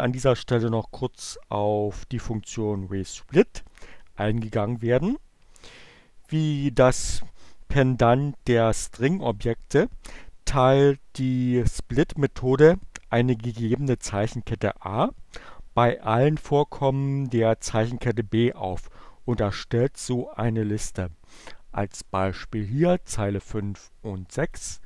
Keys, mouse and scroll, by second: 24.1 click.